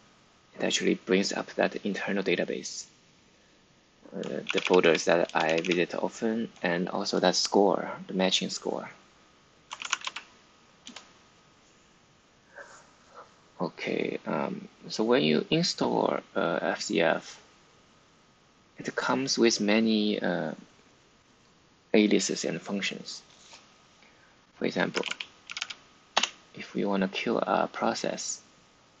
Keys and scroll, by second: 4.4 Down, 4.5 Down, 4.7 Down, 5.2 Up, 5.4 Up, 5.5 Page_Up, 9.4-10.4 typing, 10.8 Return, 24.6-26.1 typing.